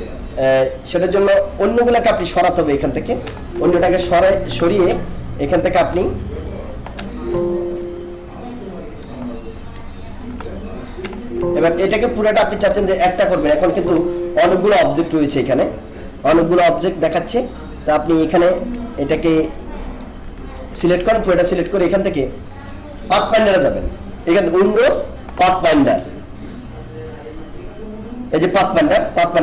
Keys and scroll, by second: 3.8 ctrl+z, 11.1 alt+space, 12.6 ctrl+-, 13.5 alt+space, 26.9 ctrl+F10.